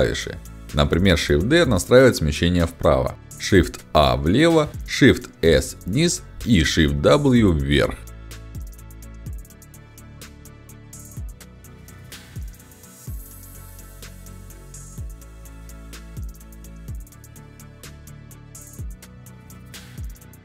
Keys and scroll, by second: 1.3 shift+d, 2.9 shift+a, 4.5 shift+d, 5.3 shift+s, 7.2 shift+w, 9.4 shift+s, 11.8 w, 13.5 shift+s, 15.5 shift+w, 19.1 shift+s.